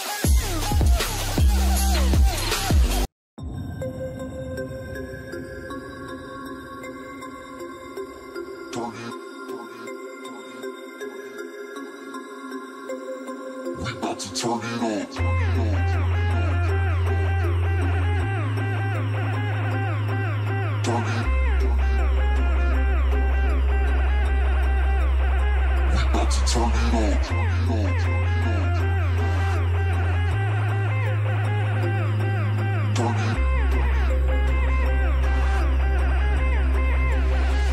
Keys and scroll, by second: 12.2 ctrl+space, 14.3 space, 26.4 ctrl+space, 27.4 ctrl+shift+space, 28.4 ctrl+alt+shift+space, 30.0 ctrl+alt+shift+space, 32.7 ctrl+alt+shift+space, 33.5-34.6 typing, 36.2 typing.